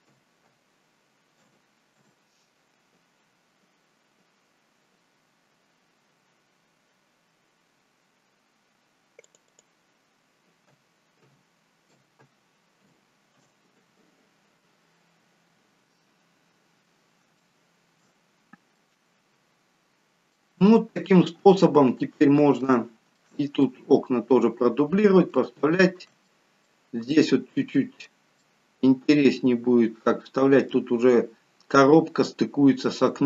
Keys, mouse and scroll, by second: 4.4-6.4 scroll down 1, 8.2-9.3 scroll down 1, 9.3 click, 9.5 click, 15.2-15.7 scroll up 1, 15.7 scroll down 1, 15.9-16.4 scroll down 1, 17.1 scroll down 2, 17.3 shift+middle click, 18.2-18.7 scroll up 2, 18.7 middle click, 21.9-22.5 scroll up 2, 22.5 scroll up 2, 22.7 shift+middle click, 23.8 middle click, 24.9-25.3 scroll down 2, 25.3 shift+middle click, 26.2 middle click, 27.1 middle click.